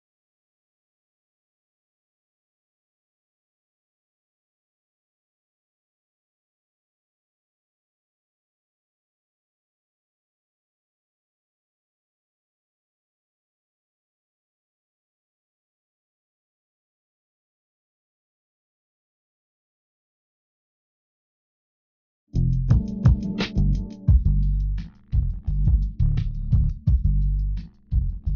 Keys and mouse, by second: 12.0 e, 15.8-17.3 drag, 22.6 KP_1, 25.3 z.